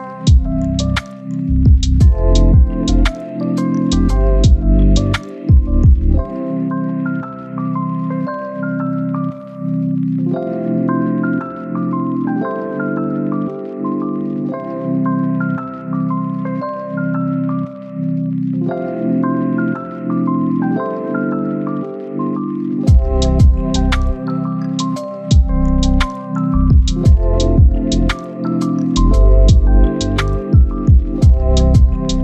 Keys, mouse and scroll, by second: 0.1 scroll down 1, 0.3 scroll up 1, 1.0 click, 1.2 scroll down 1, 1.5-1.8 scroll up 1, 1.8 right click, 2.2 scroll down 1, 2.3 scroll up 1, 2.4 right click, 3.5 click, 3.7 right click, 4.2-4.8 scroll up 2, 4.3 right click, 4.8 right click, 5.3 scroll up 1, 5.5 right click, 6.1 click, 6.2 scroll down 1, 6.4-7.1 scroll up 1, 7.6 click, 8.9-9.5 scroll up 1, 9.5 right click, 10.0 scroll up 1, 10.2 scroll down 1, 10.4-10.8 scroll up 1, 10.8-12.2 right drag, 17.3-18.1 scroll up 1, 18.1 click, 19.4 right click, 19.9 scroll up 1, 20.0 right click, 22.6 right click, 22.9 scroll up 1, 23.0 right click, 24.9 click, 25.7 scroll down 1, 25.9 right click, 26.8-32.2 scroll up 2, 26.9 right click.